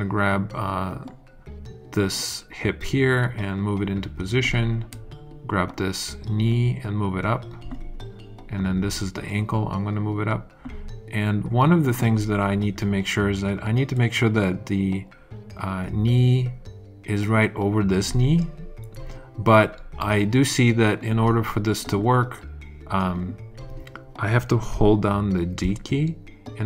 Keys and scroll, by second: 25.6 d.